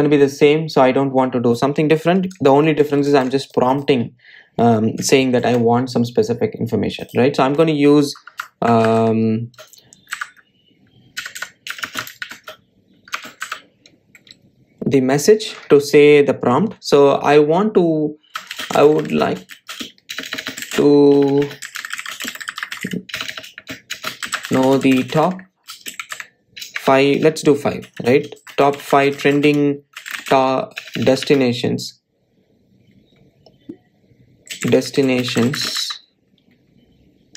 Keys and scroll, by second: 4.0 super+c, 6.7 super+v, 11.3 Delete.